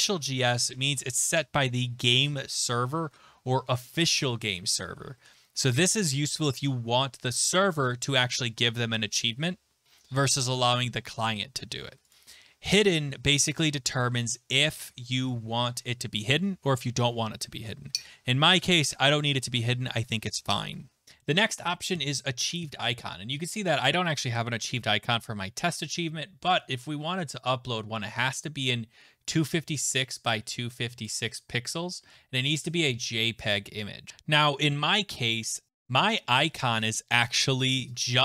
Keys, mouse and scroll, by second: 12.1 click, 21.0 click, 31.0 click, 34.1 click.